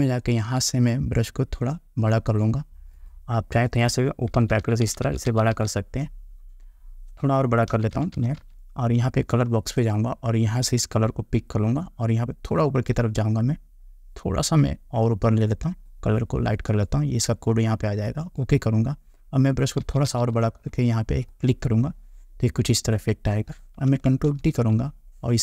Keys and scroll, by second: 4.5 ], 7.9 ], 20.0 ].